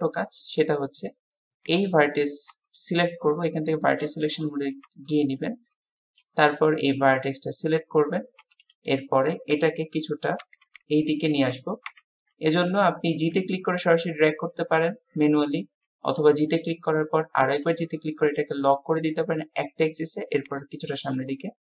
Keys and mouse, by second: 0.6 middle click, 2.7 shift+middle click, 5.1 shift+middle click, 5.7 middle click, 7.9-9.6 middle drag, 12.7 middle click, 13.3 g, 21.2 KP_3.